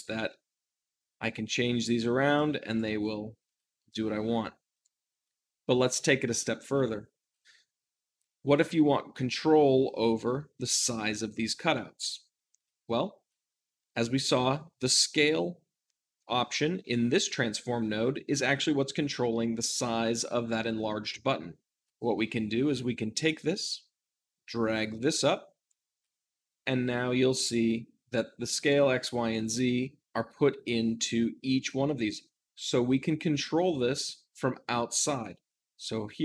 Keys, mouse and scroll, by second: 0.0 r, 2.2 right click, 2.5 click, 2.9 r, 3.3 right click, 3.6 s, 3.7 right click, 4.7-6.5 drag, 6.7-11.7 shift+middle drag, 11.6-36.2 drag.